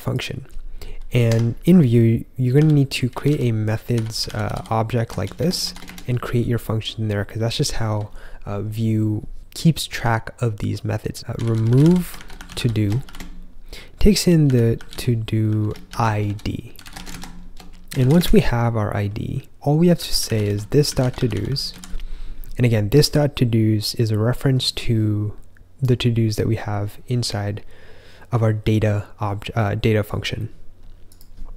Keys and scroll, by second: 1.2 Escape, 1.6-5.7 typing, 5.8 Return, 11.0-18.6 typing, 19.6-22.1 typing.